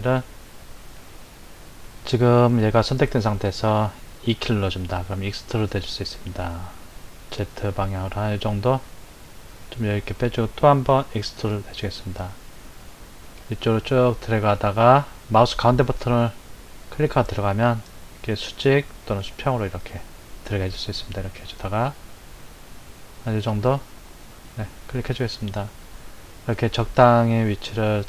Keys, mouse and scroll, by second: 1.8 click, 4.3 e, 11.2 e, 26.4-28.0 shift+middle drag.